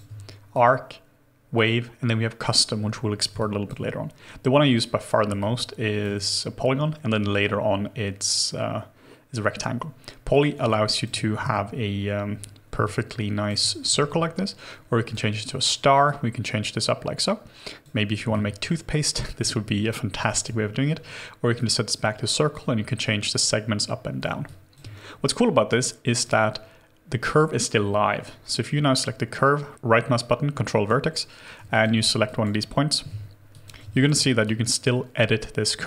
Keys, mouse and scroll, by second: 3.4 alt+click, 5.4 alt+click, 10.6 alt+click, 12.8 alt+click, 18.3 alt+click, 20.2 alt+click, 24.4 alt+click, 28.2 right click, 31.7 alt+click, 33.1 ctrl+z.